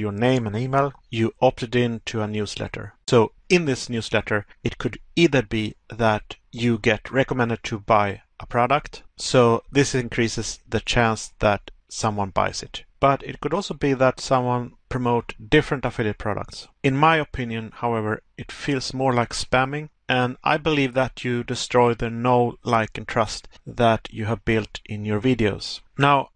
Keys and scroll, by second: 0.6 Pause, 8.8 Pause, 13.3 Pause, 19.8 Pause, 25.2 Pause.